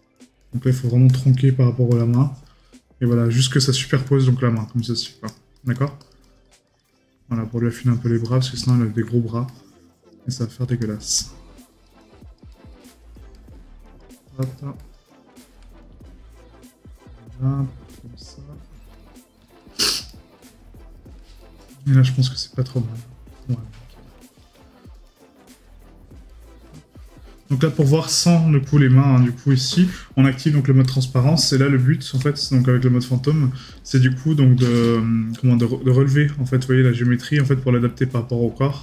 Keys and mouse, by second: 8.7 right click, 20.1 right click, 21.4 right click, 23.4 right click, 26.3 right click, 31.4 right click, 32.8 right click.